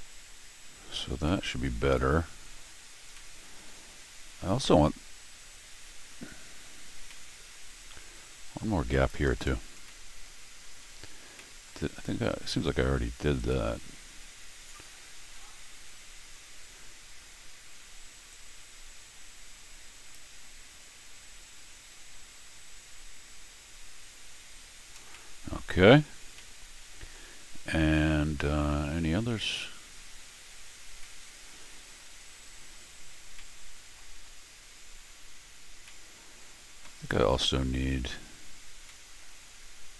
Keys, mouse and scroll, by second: 1.0 middle click, 1.3-2.5 middle drag, 3.0 scroll up 1, 3.1 middle click, 4.4 scroll up 1, 4.5-23.5 right drag, 7.1 middle click, 7.4 middle click, 8.9 click, 9.9 middle click, 11.2 middle click, 11.4 middle click, 11.9 middle click, 13.4 click, 18.3-20.1 drag, 25.0 middle click, 25.1 middle click, 26.0-27.9 right drag, 26.4 middle click, 27.9 middle click, 29.0 middle click, 30.2 middle click, 31.0 middle click, 33.4 middle click, 35.9 middle click, 38.9 middle click.